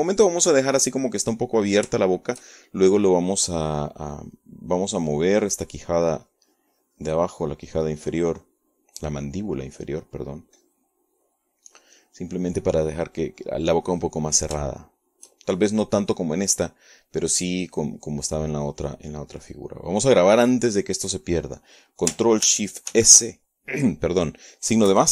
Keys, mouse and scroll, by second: 5.2 click, 5.8 click, 6.4-10.1 drag, 10.2 click, 10.8-12.7 drag, 14.6 click, 15.6 click, 16.4 shift+click, 24.6 ctrl+shift+s.